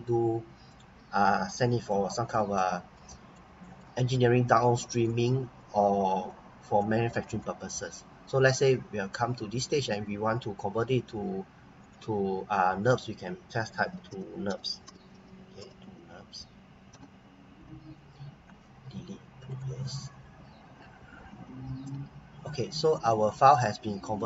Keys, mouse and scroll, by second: 2.5 right click, 3.3 right click, 4.1 right click, 5.6-6.3 scroll up 1, 6.3 scroll down 1, 7.0 right click, 8.5 click, 11.8 click, 13.6-16.3 typing, 16.9 Return, 19.5 click, 21.3 Return, 22.8 click, 23.3 right click.